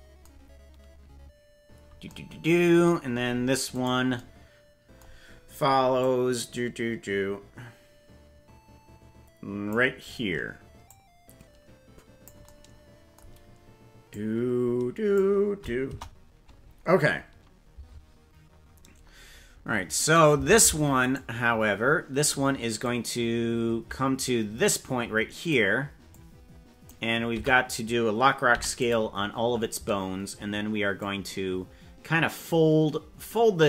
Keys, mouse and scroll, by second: 3.9 right click, 6.0-9.7 drag, 10.8-12.2 drag, 14.0-15.1 drag, 15.9 KP_0, 20.1 right click, 20.6 ctrl+Tab, 21.2 right click, 22.8-25.5 drag, 26.1 click, 27.4 a, 28.5 i, 30.9-33.6 drag.